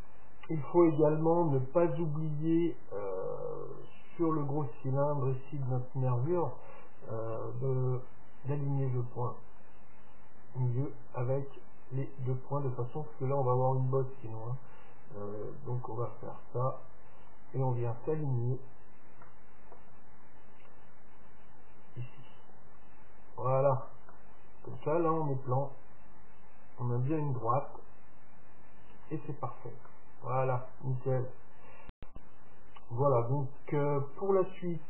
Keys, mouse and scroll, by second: 2.6-6.2 middle drag, 6.4 middle click, 7.5 Tab, 7.9 middle click, 9.1 Tab, 9.7-11.5 drag, 10.9-12.6 right drag, 15.9 KP_1, 17.4-19.1 middle drag, 19.5-22.3 middle drag, 21.3-23.2 drag, 24.2-25.9 middle drag, 25.9 scroll up 1, 26.2-27.0 scroll down 1, 27.0 scroll down 1, 27.2 middle click, 29.1 Tab, 29.3-32.1 middle drag.